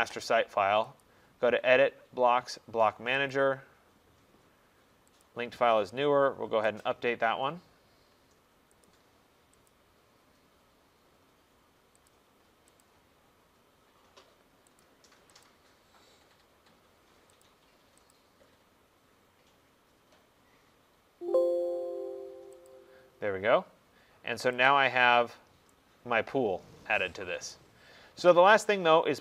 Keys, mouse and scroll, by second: 1.1 click, 3.4 click, 5.3 click, 6.9 click, 8.9 click, 9.8 click, 12.2 click, 12.9 click, 14.9 click, 15.5 click, 17.5 click, 18.2 click, 22.8 click, 24.2 click, 24.8 click, 27.5 right click, 28.2 middle click, 28.2 middle click.